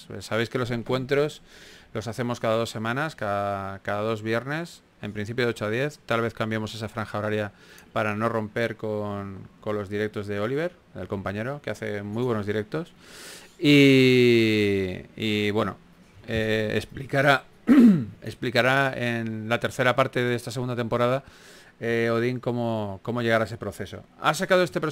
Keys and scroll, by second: 20.5 shift+f, 22.1-22.8 typing.